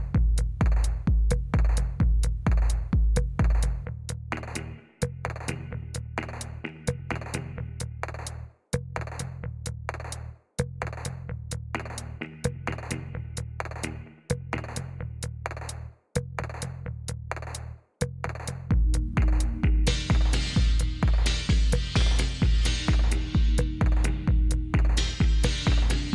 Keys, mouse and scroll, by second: 2.6-4.1 drag, 7.1-8.6 drag, 8.8-10.3 drag, 11.6-13.2 drag, 15.5 click, 16.6-18.8 typing, 24.0-25.2 drag.